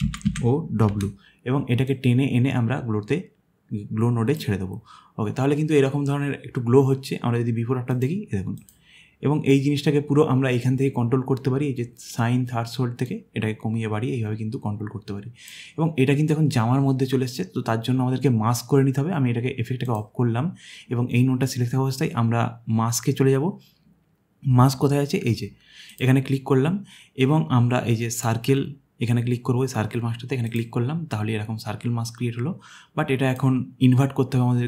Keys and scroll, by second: 0.0-0.9 typing.